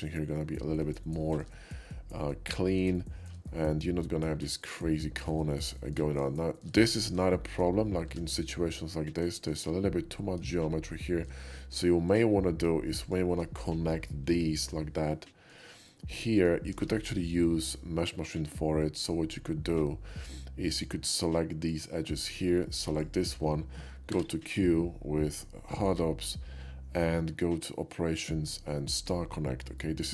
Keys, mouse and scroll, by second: 1.0-1.5 shift+middle drag, 3.0-3.3 shift+middle drag, 3.5-4.7 shift+middle drag, 5.0 shift+middle drag, 5.7 shift+middle drag, 6.2 shift+middle drag, 6.4 shift+middle drag, 6.8 shift+middle click, 7.4 shift+middle drag, 8.1 Tab, 9.4 shift+middle click, 10.5 shift+middle click, 12.1 shift+click, 13.0 shift+click, 14.3 j, 15.1 middle click, 15.9 middle click, 17.8 ctrl+z, 17.8-19.1 middle drag, 20.7 click, 21.7 ctrl+click, 22.3 ctrl+middle click, 23.0-24.1 shift+drag, 24.1 q, 28.9 click, 29.8 middle click.